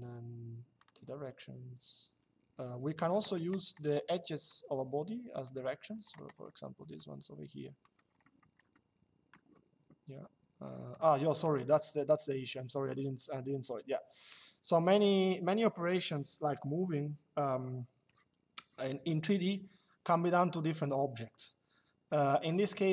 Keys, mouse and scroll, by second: 0.5 click, 3.6 shift+middle click, 5.1 click, 6.7 click, 7.9 middle click, 8.4 middle click, 10.6 click.